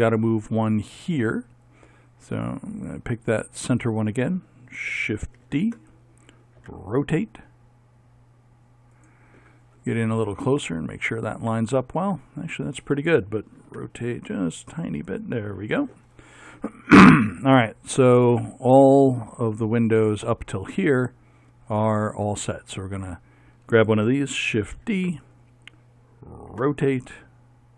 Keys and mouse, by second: 2.7-5.2 right drag, 5.5 shift+d, 6.7 r, 10.3 middle click, 10.7 middle click, 10.8 middle click, 13.7 r, 15.8 middle click, 23.1-24.6 right drag, 24.8 shift+d, 26.6 r.